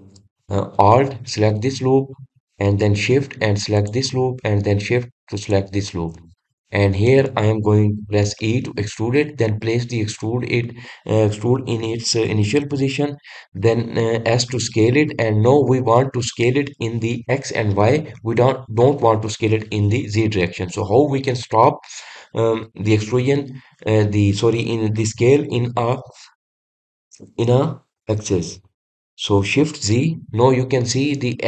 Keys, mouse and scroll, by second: 2.7 alt+click, 5.3 alt+shift+click, 6.9 alt+shift+click, 8.0-10.0 middle drag, 10.0 e.